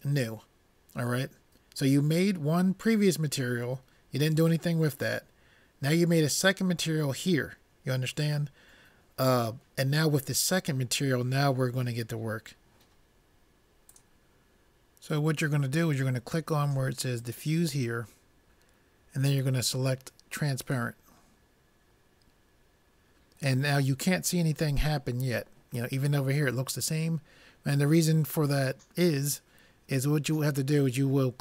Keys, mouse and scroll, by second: 17.2-19.0 drag.